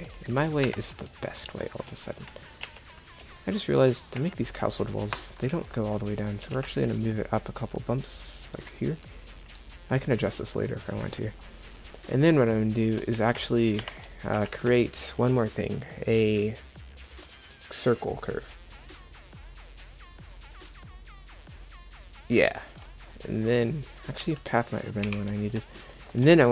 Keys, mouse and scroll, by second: 0.7 Escape, 2.7 KP_1, 6.5 g, 13.2 shift+a, 14.4 shift+a, 24.3 z, 25.1 KP_7.